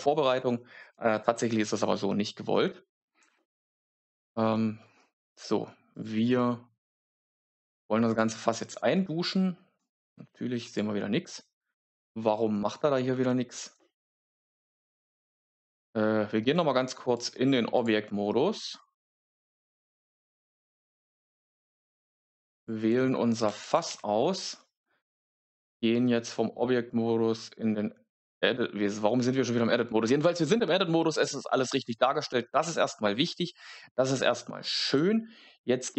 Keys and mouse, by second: 5.9 click, 8.0 click, 9.7 click, 10.6 click, 14.5 Tab, 17.1 click, 18.2 a, 19.3 Tab, 23.4 Down, 23.5 Down, 23.8 Down, 32.5 Tab.